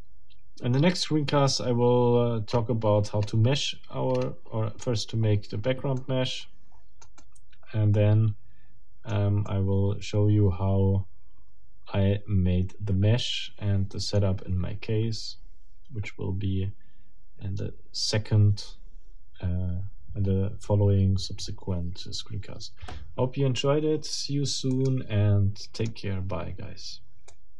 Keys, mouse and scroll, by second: 2.5-3.5 scroll up 4, 4.1-4.4 scroll up 2, 4.6-4.9 scroll down 2, 6.0-9.3 middle drag, 9.5-14.4 middle drag, 24.7 click, 25.7 click, 27.3 click.